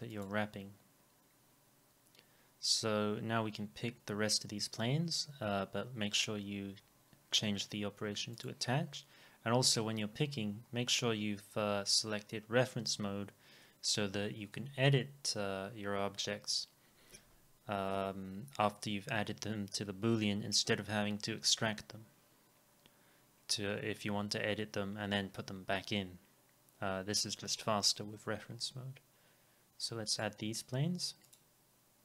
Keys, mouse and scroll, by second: 0.2-2.2 drag, 8.4-10.4 drag.